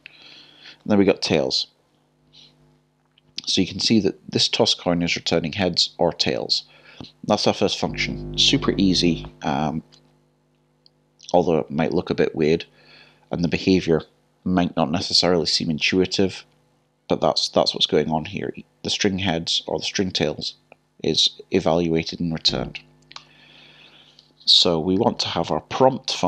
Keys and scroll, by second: 24.6-26.2 typing.